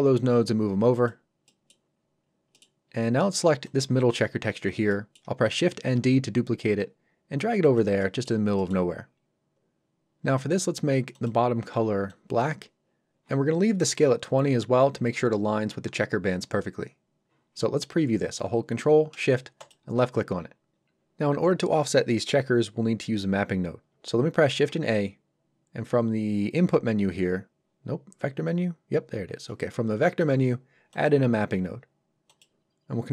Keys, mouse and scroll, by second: 0.9 click, 1.4 middle click, 1.9 scroll up 1, 2.5 middle click, 2.8-3.6 scroll up 1, 3.6 click, 4.5-4.8 scroll down 1, 4.8 middle click, 5.9 shift+d, 7.6 click, 8.0 middle click, 9.7-10.0 scroll up 1, 11.1 click, 19.5 ctrl+shift+click, 24.7 shift+a, 30.9 click.